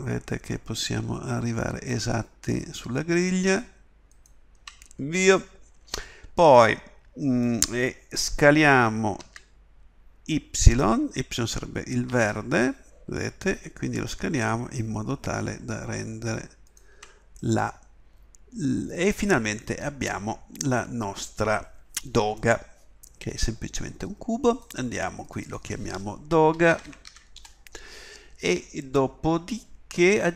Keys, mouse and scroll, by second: 9.2 s.